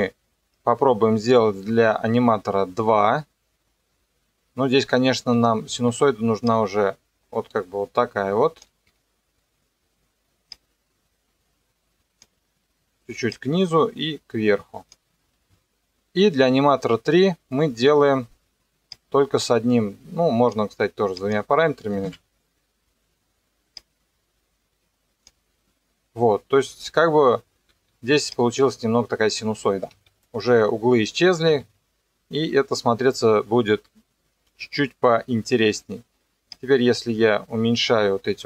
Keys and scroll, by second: 5.9 ctrl+2, 8.9 Escape, 21.8 KP_3, 22.1 KP_Enter, 27.7 ctrl+2, 29.9 Escape.